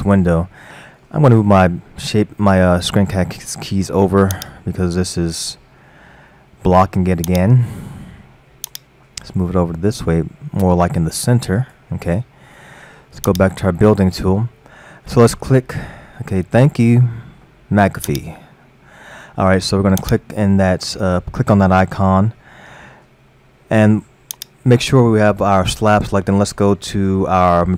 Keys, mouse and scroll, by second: 4.4 click, 7.3 click, 8.7-11.8 drag, 13.3 click, 14.2-14.9 scroll down 3, 14.9-15.3 scroll up 3, 20.1-23.0 drag.